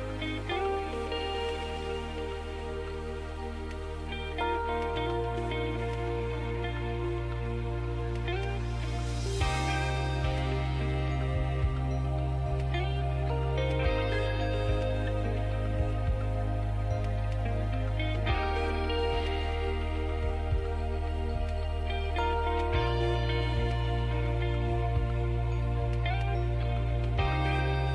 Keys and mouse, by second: 0.2 right click, 1.1 ctrl+e, 2.2 ctrl+Tab, 4.1 l, 5.6 shift+d, 7.3 p, 8.2 Tab, 9.3 z, 10.8 z, 11.3 Tab, 12.2 KP_1, 12.6 z, 13.6 ctrl+Tab, 16.5 a, 17.1 a, 18.3 b, 19.7 KP_Divide, 21.2 z, 23.5 e, 25.3 s, 27.5 e.